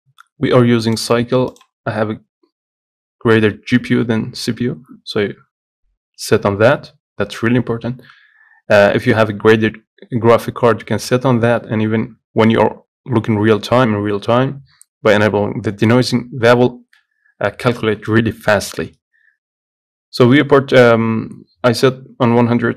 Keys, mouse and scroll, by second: 0.3 click, 1.9-4.8 drag.